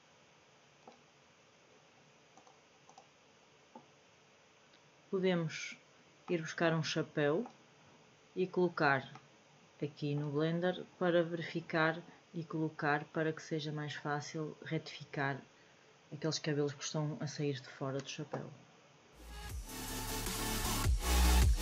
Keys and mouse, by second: 2.9 click, 6.2-7.4 middle drag, 9.0-10.1 middle drag, 20.2-21.6 drag.